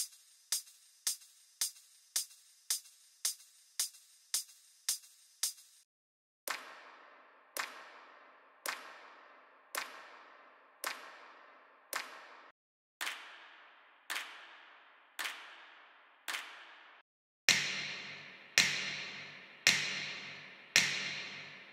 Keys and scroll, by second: 5.8 s, 12.4 s, 12.6 s, 14.4 typing, 16.8 typing.